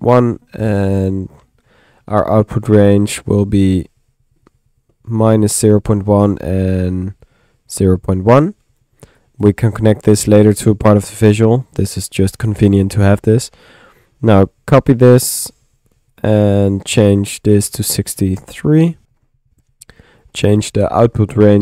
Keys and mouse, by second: 3.3-4.5 middle drag, 4.9-7.8 middle drag, 8.3 click, 8.7 middle click, 9.2 click, 10.5-11.7 drag, 14.1 right click, 15.9-16.6 typing, 16.1 ctrl+click, 16.5 ctrl+click, 16.9 ctrl+click, 17.7 click, 19.0 click, 20.2 click.